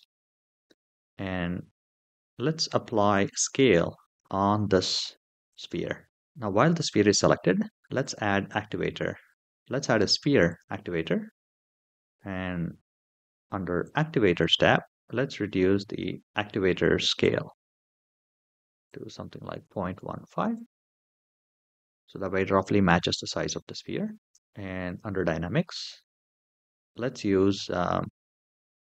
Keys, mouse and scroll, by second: 2.3 click, 2.9 click, 3.9 ctrl+a, 7.8-10.7 drag, 11.8-12.5 scroll down 4, 13.6 click, 17.0-18.0 drag, 18.6-20.2 drag, 21.3-22.5 scroll up 4, 23.0-23.4 scroll down 3, 24.3 shift+middle click, 24.6 click.